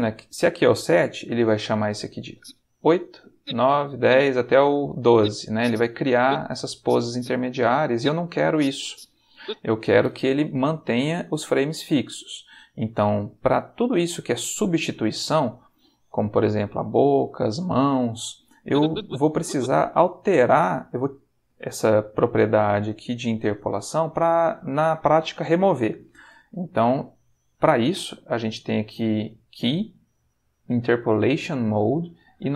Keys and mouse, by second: 2.3 Right, 3.3 Right, 5.0 Left, 6.6 Right, 7.8 Right, 8.5 Left, 18.6 click, 20.2-22.7 drag, 29.1 click.